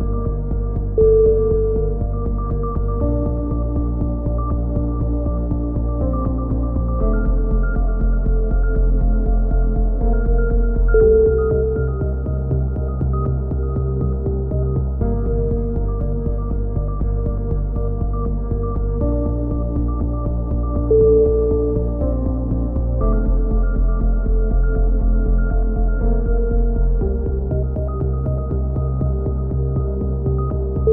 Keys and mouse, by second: 0.2 a, 0.4-1.4 middle drag, 0.8 z, 1.4 click, 4.0-5.1 drag, 5.1 middle click, 5.7 KP_7, 5.7 click, 6.5 e, 7.1 click, 7.6 s, 9.3 click, 12.8-15.8 drag, 16.8-20.5 drag, 20.5 right click, 21.4 middle click, 21.6 click, 23.0 KP_7, 23.8 click, 24.0 click, 24.3 z, 25.1 s.